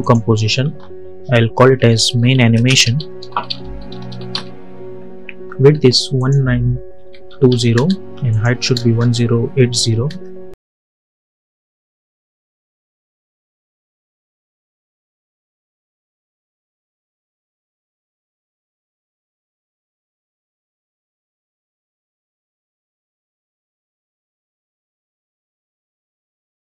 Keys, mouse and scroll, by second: 1.4-4.7 typing, 6.0 click, 11.5-16.2 drag, 20.5 click, 25.7-26.7 typing.